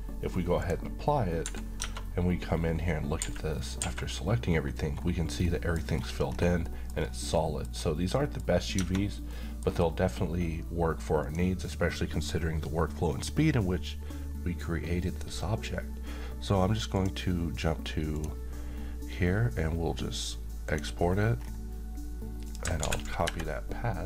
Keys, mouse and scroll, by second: 0.6 click, 1.4 Escape, 1.8-2.2 scroll up 1, 3.2 a, 3.8 a, 4.9-5.4 scroll down 1, 5.4-6.1 middle click, 5.9 scroll down 1, 6.6 middle click, 6.9-7.3 scroll down 2, 7.3 middle click, 7.7 scroll up 1, 8.2 middle click, 8.8 Tab, 9.3-9.9 middle drag, 11.2 click, 15.0 click, 20.6 click, 21.3 scroll down 1, 22.5 click, 22.8 c.